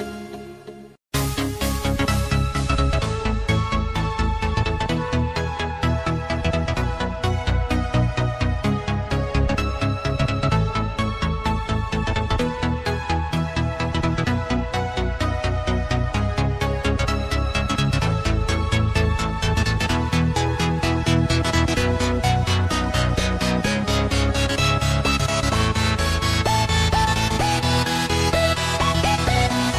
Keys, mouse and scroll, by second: 5.5 click, 10.2 click, 15.7 click, 18.3 click.